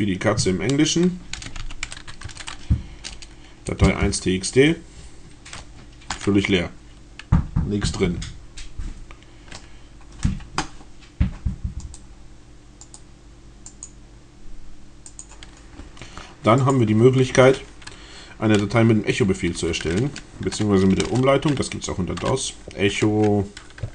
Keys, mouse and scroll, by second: 0.9-2.5 typing, 3.5 Return, 11.6 middle click, 12.8 middle click, 13.5 click, 14.5 click, 16.6 click, 19.2-21.1 typing, 23.7-23.9 typing.